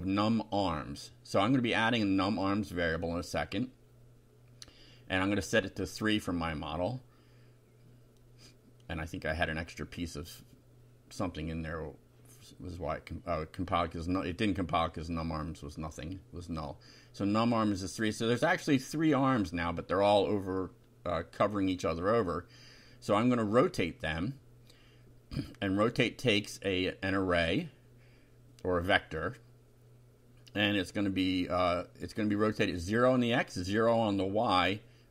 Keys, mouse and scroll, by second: 0.0-2.5 typing, 0.9 shift+End, 3.0 shift+Down, 3.4 shift+Return, 4.1 shift+], 4.7 shift+Up, 6.2 F5, 9.3 click, 10.3 ctrl+c, 10.9 ctrl+click, 12.1 End, 12.3 Return, 12.6 ctrl+v, 13.3-14.8 typing, 15.7 F5, 18.2 click, 19.5 click, 20.7 ctrl+r, 21.5 click, 22.7-25.2 typing, 26.2-27.8 typing, 27.9 shift+Left, 31.7 0, 32.9 ,, 34.0-35.1 typing.